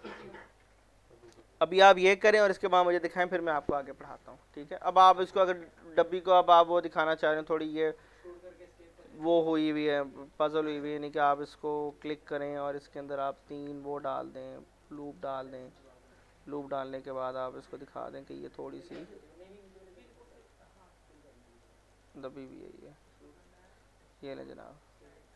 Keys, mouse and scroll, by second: 4.3 alt+middle click, 4.7 scroll up 1, 4.9 middle click, 7.0 click, 7.5 scroll down 1, 7.7 middle click, 9.6 F4, 10.6 click, 11.9 alt+r, 13.3 click, 16.1 alt+middle click, 17.2 click, 17.6 alt+middle click, 18.7 click, 19.3 w, 19.7-23.6 drag, 23.8 alt+middle click, 25.0 click.